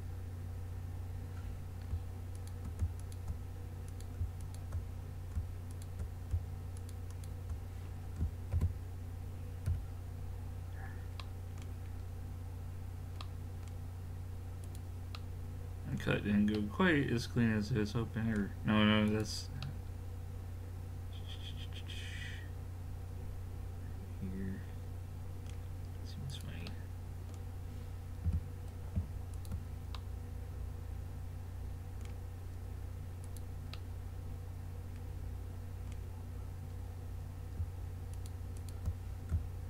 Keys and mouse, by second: 2.4-9.0 drag, 8.5 alt+m, 10.8 middle click, 14.6-16.5 right drag, 16.3 middle click, 16.5 middle click, 19.1 click, 19.7-20.9 middle drag, 26.3 click, 26.7-28.2 middle drag, 28.3 g, 30.0 middle click, 33.7-35.3 middle drag.